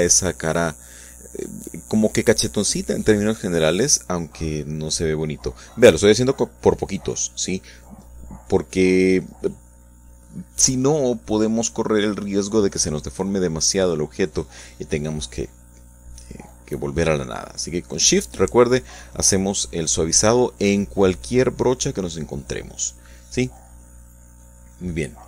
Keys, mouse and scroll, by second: 0.4-1.4 drag, 2.1-7.7 drag, 7.9-12.9 drag, 13.6-14.7 shift+middle drag, 15.1 middle click, 15.9-18.3 shift+drag, 20.1-21.3 shift+drag, 21.3 shift+middle click, 21.9 shift+middle click, 22.5 click, 23.3 shift+click, 25.1 click.